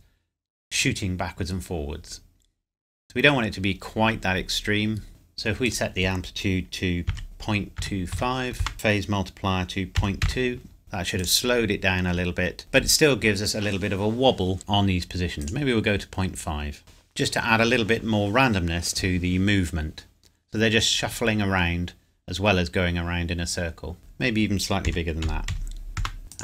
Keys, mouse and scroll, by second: 5.1 click, 7.1 KP_Decimal, 7.8 KP_2, 8.1 KP_5, 8.6 KP_Enter, 8.7 click, 10.0 KP_Decimal, 10.2 KP_2, 10.8 click, 15.4 click, 16.8 KP_Enter, 24.0 click, 24.9 KP_Decimal, 25.2 KP_7, 25.5 KP_5, 26.0 KP_Enter, 26.3 click.